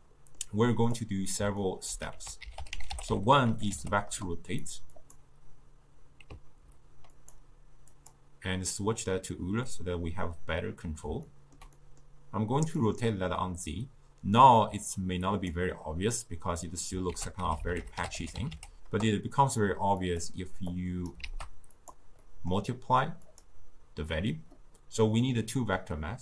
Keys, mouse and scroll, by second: 1.1-5.3 drag, 13.0-20.3 drag, 21.3 shift+d, 22.3-26.2 middle drag.